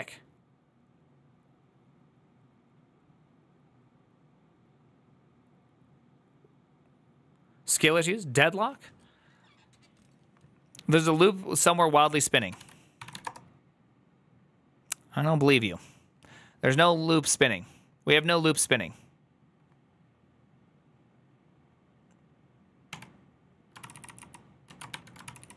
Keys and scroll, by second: 13.1 ctrl+a, 13.1 Return, 13.1 typing, 22.8 q, 23.8 ctrl+c, 23.9 ctrl+c, 24.0 ctrl+c, 24.5 ctrl+a, 24.8 1, 25.1 ctrl+c.